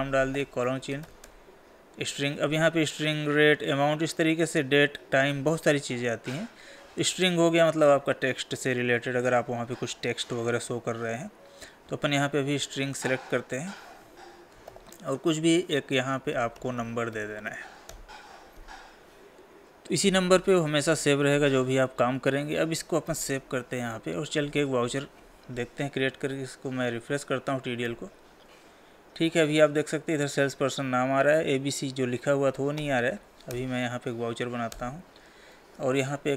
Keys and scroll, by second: 14.4 Tab, 23.5 ctrl+s.